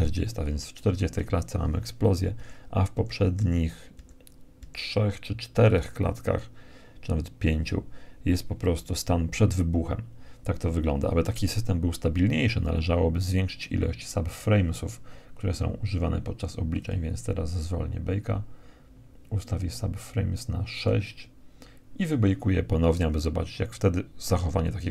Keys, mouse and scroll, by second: 1.8 Left, 2.3 Left, 2.8 Left, 3.4 Left, 4.0 Left, 16.2-18.1 drag, 20.1-21.9 drag, 24.0-24.9 drag.